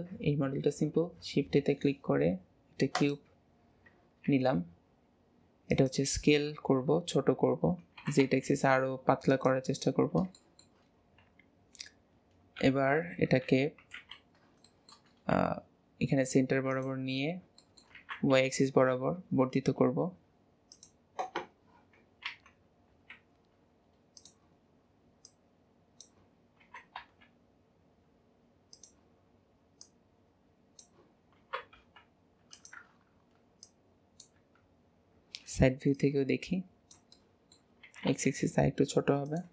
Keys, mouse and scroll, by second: 0.9 shift+a, 4.2 s, 7.9 s, 9.9-10.3 scroll up 2, 10.3-12.5 shift+middle drag, 12.5 KP_7, 13.3 KP_3, 13.9 alt+z, 14.3-14.7 scroll down 3, 14.7-15.3 shift+middle drag, 15.3 g, 17.1 scroll up 3, 17.5 shift+middle click, 17.9 s, 22.2 s, 24.5-25.2 scroll up 2, 25.2 click, 26.6 s, 29.8 click, 31.3 s, 33.7 click, 34.4 KP_1, 35.9 click, 37.1 shift+middle click, 37.8 s.